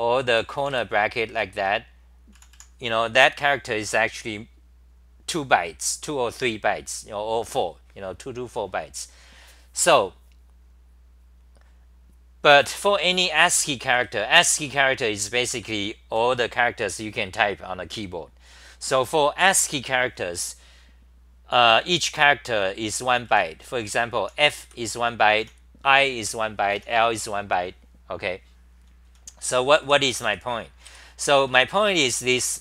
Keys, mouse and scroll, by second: 0.0-2.5 typing, 13.5 ctrl+g, 14.0 g, 14.4 9, 15.6 ctrl+g, 15.6 c, 15.8 c, 16.0 c, 16.2 c, 20.7 c, 21.8-27.1 typing, 28.8-32.6 typing.